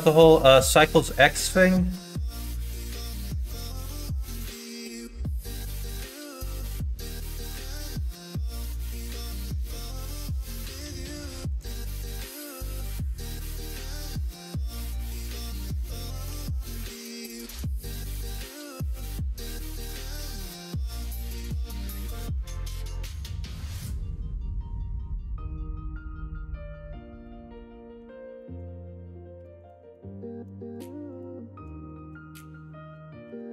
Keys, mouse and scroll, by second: 1.0 middle click, 1.5 middle click, 2.1 ctrl+b, 12.0-13.2 middle drag, 13.5 middle click, 14.8 middle click, 16.3 g, 19.2-20.2 middle drag, 20.2 scroll down 1, 20.5-21.6 middle drag, 21.8-23.2 middle drag, 23.7 middle click, 25.2-27.0 middle drag, 27.2 scroll up 1, 27.4 middle click, 28.4 scroll up 1, 28.6 scroll down 1, 28.6 middle click, 30.7 shift+click, 31.1 shift+click, 31.9 ctrl+z, 32.3 middle click, 33.2 ctrl+f.